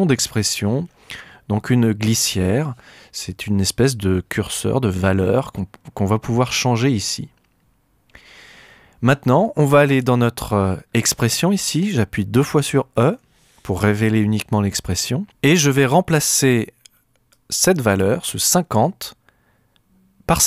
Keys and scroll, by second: 12.9 e.